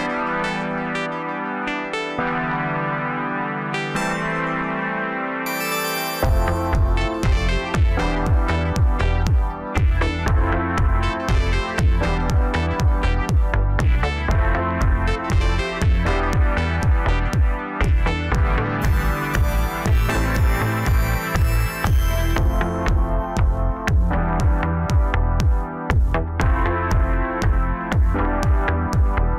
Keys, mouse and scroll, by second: 0.0 scroll up 1, 0.5 Tab, 0.9-2.1 middle drag, 2.1 3, 2.4 click, 3.1 click, 3.8 middle click, 4.6 shift+click, 5.0-6.1 middle drag, 8.4-9.5 drag, 9.9-12.0 middle drag, 12.0-15.0 drag, 16.1-17.3 middle drag, 17.3 click, 18.1 KP_3, 18.8-19.7 scroll up 1, 26.1 middle click, 26.8 click, 27.2-28.6 middle drag, 28.6 KP_7.